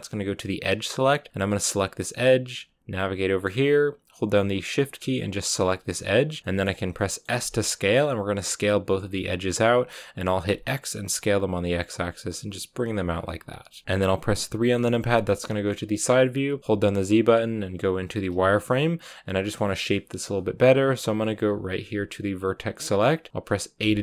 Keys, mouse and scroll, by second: 1.6 right click, 2.1-5.5 middle drag, 5.5 shift+right click, 5.8-7.3 middle drag, 7.3 s, 13.0 scroll down 4, 13.2-14.6 middle drag, 14.6 KP_3, 15.4-18.2 shift+middle drag, 18.2 z, 19.3-22.3 scroll up 2, 22.3-23.7 drag, 23.7 a.